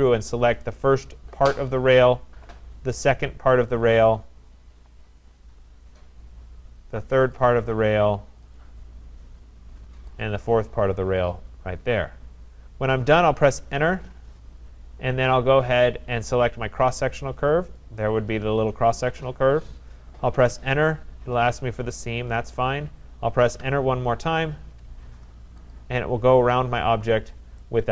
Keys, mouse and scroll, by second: 0.6 click, 2.0 click, 4.4 click, 5.4 click, 5.7-6.5 scroll, 6.5 middle click, 7.3 click, 8.6 click, 10.3 click, 13.4 Return, 17.8 click, 20.5 Return, 23.6 Return, 25.7 click, 27.1-27.6 scroll.